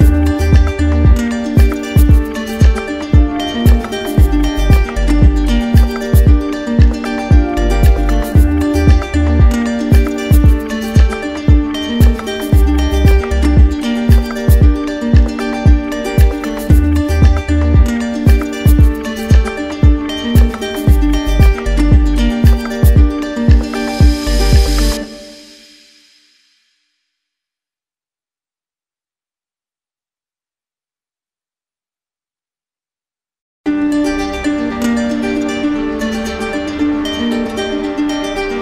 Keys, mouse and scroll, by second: 0.7-1.8 drag, 2.6 alt+click, 4.0 click, 6.7 right click, 7.7 click, 8.2 z, 10.6 right click, 14.8 right click, 14.8 alt+click, 15.1 ctrl+z, 15.9 right click, 19.3 alt+click, 20.5 alt+click, 23.6 alt+click, 28.3 alt+click, 28.7 ctrl+z, 33.9 alt+click, 36.0 alt+click, 36.2 d, 37.9 ctrl+z, 38.5 ctrl+z.